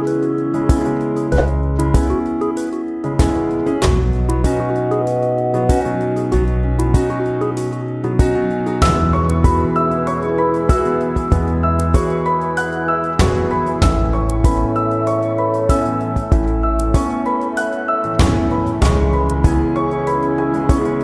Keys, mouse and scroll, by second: 1.1 click, 2.3-4.1 drag, 4.1 ctrl+z, 6.5-21.0 drag.